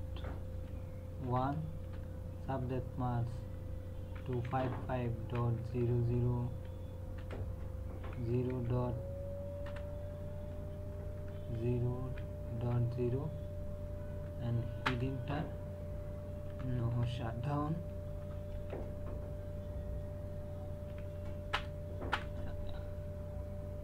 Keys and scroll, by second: 0.0-1.8 typing, 4.0 KP_2, 4.3 KP_5, 5.2 KP_Decimal, 5.6 KP_0, 7.2 BackSpace, 8.1 KP_Decimal, 8.5 KP_5, 9.7 BackSpace, 11.2 KP_0, 12.0 KP_Decimal, 12.6 KP_0, 14.8 Return, 16.2-18.5 typing, 20.9 h, 21.5 Return.